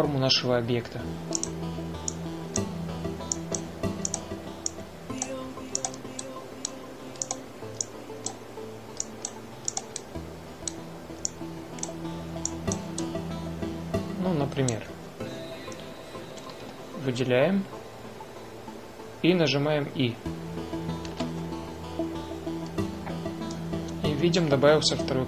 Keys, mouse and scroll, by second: 2.2-3.3 drag, 4.2 click, 5.8 click, 7.1-8.9 middle drag, 9.1 click, 10.8-12.1 middle drag, 12.4-13.5 middle drag, 13.6-15.1 middle drag, 17.2 a, 17.4 a, 21.9 i.